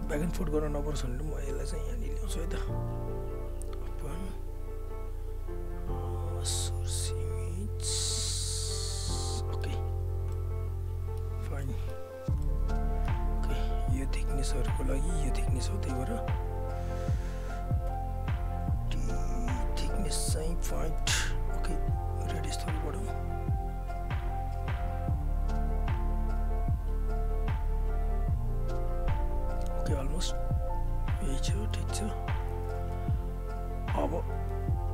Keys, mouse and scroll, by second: 1.2 click, 9.1 alt+middle click, 9.8 alt+right click, 10.3 alt+middle click, 11.3 alt+right click, 11.6 alt+middle click, 12.1 alt+right click, 14.5-17.4 alt+drag, 17.9 t, 20.3 click, 23.5 alt+right click, 23.8-26.9 alt+drag, 26.9 alt+right click, 28.1 click, 29.3 alt+right click, 29.5 alt+click, 32.1 alt+right click, 32.3 alt+click, 34.5 r.